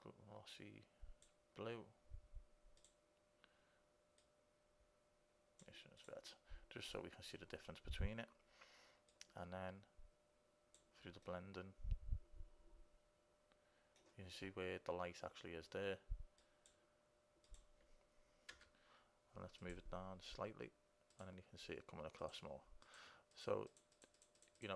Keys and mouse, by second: 0.5 click, 2.9-5.0 drag, 6.2-8.2 drag, 9.3-11.3 drag, 11.8-13.3 middle drag, 16.5-18.7 drag, 20.0-24.7 drag.